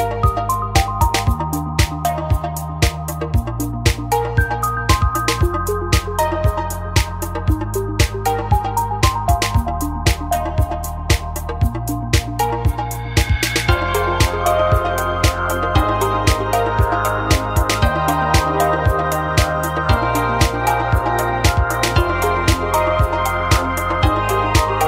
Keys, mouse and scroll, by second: 18.6 a, 19.4 middle click, 20.1-21.2 right drag, 20.8 w, 21.8 middle click, 22.6-24.2 right drag, 23.1 w.